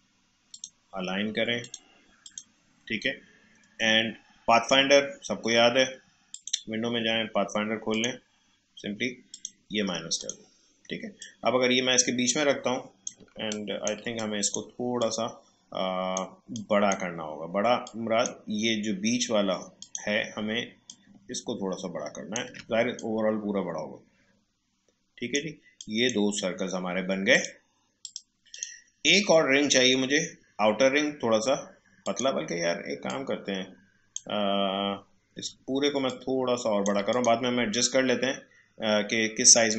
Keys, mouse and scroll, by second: 3.6 right click, 6.4 click, 8.0-13.1 drag, 13.1 space, 13.4-25.8 ctrl+drag, 32.0-36.0 drag, 36.4 alt+shift+h.